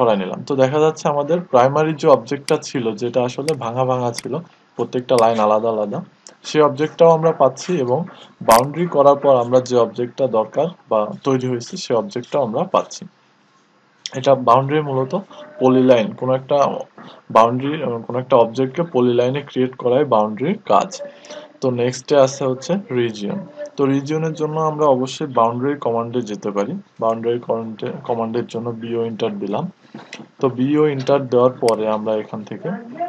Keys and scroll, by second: 30.2-30.9 typing.